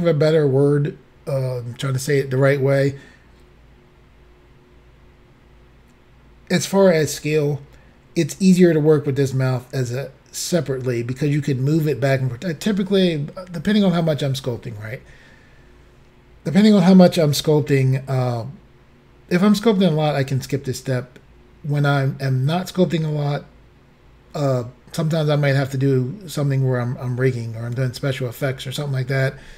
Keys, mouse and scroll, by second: 29.4-29.5 scroll up 1.